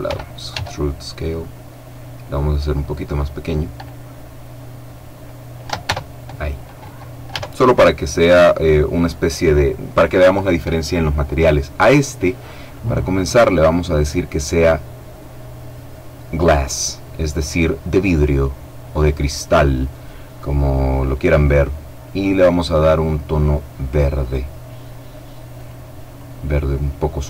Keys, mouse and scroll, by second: 0.2 s, 2.3 click, 5.4 Caps_Lock, 5.6 Tab, 7.0 Caps_Lock, 12.4 click, 13.2 click, 19.0 click, 20.6 click, 22.4-24.3 drag, 25.2 click.